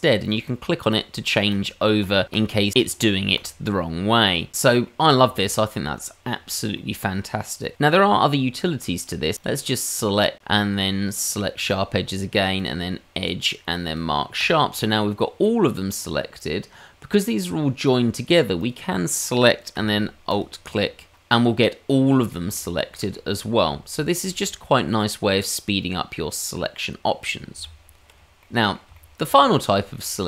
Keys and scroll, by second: 27.6 Tab.